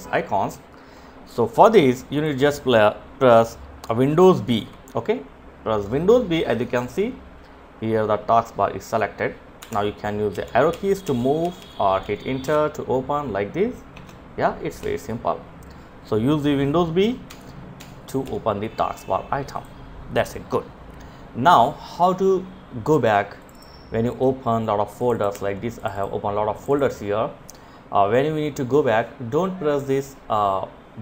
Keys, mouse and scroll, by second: 1.2 click, 3.5 super+b, 8.6 Up, 9.5 Left, 9.7 Left, 10.0 Left, 10.5 Left, 10.6 Left, 11.5 Return, 13.9 Right, 16.3 Right, 16.8 Right, 17.3 Left, 18.5 click.